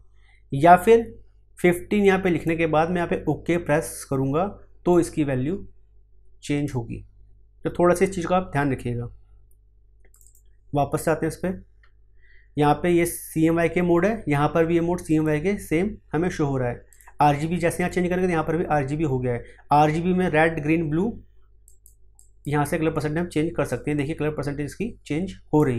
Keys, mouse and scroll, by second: 2.0-4.9 drag, 4.9-9.0 drag, 10.1 click, 15.0 click, 21.6-25.7 drag.